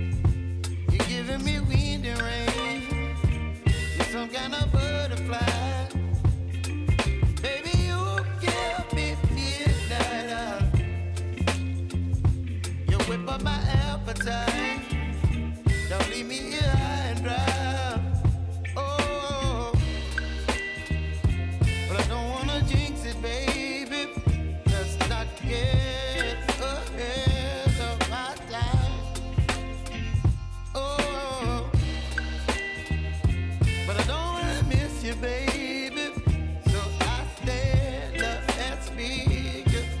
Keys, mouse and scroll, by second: 0.2 y, 1.1 scroll up 1, 2.0-3.9 drag, 5.2 typing, 6.5-10.5 drag, 10.5-13.6 drag, 13.6-18.3 drag, 18.3 click, 19.4-22.0 drag, 22.0-24.3 drag, 24.6 space, 26.0 click, 26.3 space, 28.2 click, 29.8-30.3 typing, 31.1 scroll down 1, 33.0 click, 33.7 shift+click, 34.0 s, 35.2-40.0 drag.